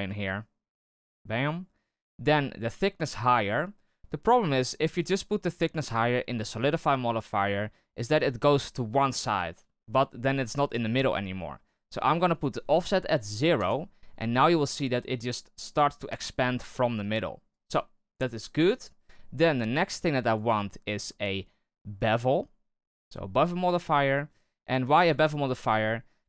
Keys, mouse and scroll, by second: 3.0-7.1 drag, 7.1-12.3 middle drag, 12.3-17.7 drag, 17.7-18.1 middle drag, 18.1-18.5 scroll down 2, 18.5-20.2 shift+middle drag, 20.2-23.4 drag, 23.4-23.8 scroll up 1, 23.8-24.2 shift+middle drag, 24.2-24.8 scroll up 1, 24.8-25.6 scroll up 1, 25.6-26.2 shift+drag.